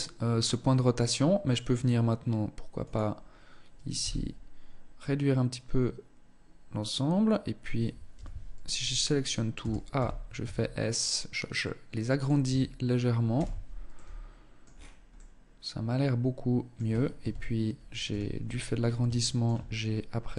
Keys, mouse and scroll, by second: 3.3 z, 7.5 z, 8.6 a, 9.3 a, 9.7 s, 11.8 Tab, 12.7 z, 13.2 middle click, 14.0-14.5 scroll down 6, 14.5 middle click, 16.5 KP_1, 17.4 z, 17.7 scroll up 8, 18.3 shift+middle click, 18.8 shift+scroll up 1, 20.0 Tab.